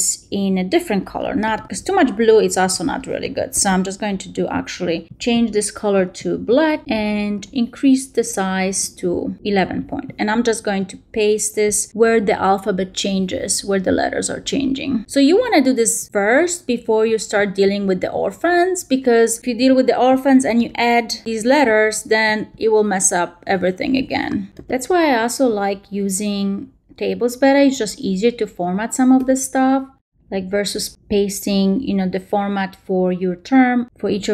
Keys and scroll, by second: 1.3 shift+super+c, 2.2 shift+Return, 2.6 shift+Up, 3.1 shift+super+Up, 3.4 shift+super+v.